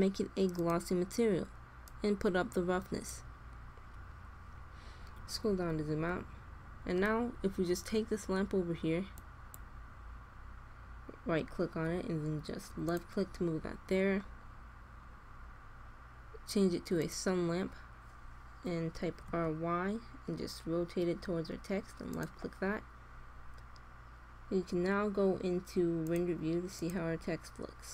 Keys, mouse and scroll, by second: 1.7-3.5 drag, 5.1-8.3 middle drag, 9.1-10.7 drag, 16.8 middle click, 16.9-18.7 drag, 18.8 r, 26.0-27.8 drag.